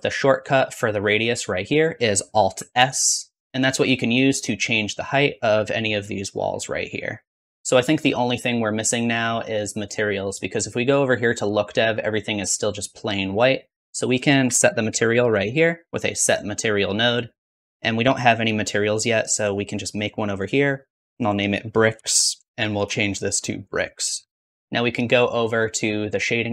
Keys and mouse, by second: 2.8 alt+s, 3.5 ctrl+z, 3.5-4.6 drag, 5.0-6.2 drag, 5.8 alt+s, 6.4-7.4 drag, 7.5-8.7 drag, 10.8-12.1 middle drag, 12.1-14.1 drag, 14.2 shift+click, 14.4 shift+a, 16.3 s, 20.5-26.5 drag, 24.6 ctrl+s.